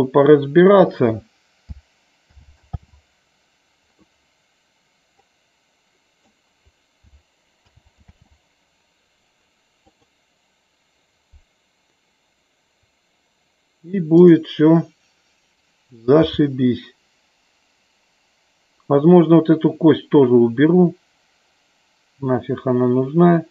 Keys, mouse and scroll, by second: 2.3 alt+g, 2.8 alt+r, 5.3-6.4 drag, 7.7 alt+g, 8.0 alt+r, 9.9 click, 16.3 g.